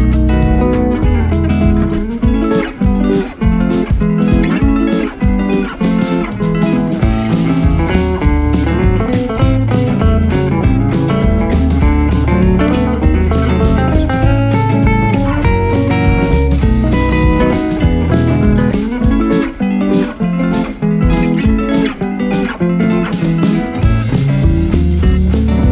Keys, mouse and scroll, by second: 0.9 click, 1.4 click, 1.7 click, 2.2-4.5 drag, 5.6-7.0 drag, 9.4 KP_0, 10.6-11.2 scroll down 4, 11.2-12.8 scroll up 4, 12.8 g, 14.1-14.7 right drag, 14.1-14.7 scroll up 1, 14.7 s, 17.4 click, 17.7-18.9 scroll down 7, 19.0-19.5 scroll up 1, 20.2 s, 22.4 click, 22.9 g, 24.2 click, 24.4-25.0 scroll up 2.